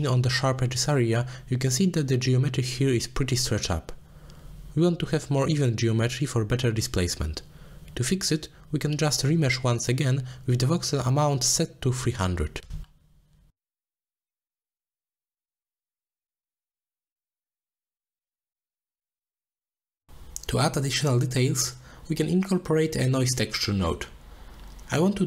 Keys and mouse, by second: 0.8 middle drag, 1.6 z, 3.3 z, 4.0 middle drag, 4.7 middle click, 5.2 middle click, 6.3-6.7 drag, 7.0 middle click, 7.6 shift+d, 8.5 click, 9.5-10.3 drag, 10.6 click, 11.0 click, 11.9 middle click, 12.1 click, 13.6 alt+shift+click, 14.4 z, 16.2-16.6 alt+shift+drag, 17.8 alt+shift+click, 19.0 middle click, 19.3 shift+middle drag, 19.6 z, 21.4 click, 21.7 drag, 22.2 click, 22.6 drag, 23.0 shift+a.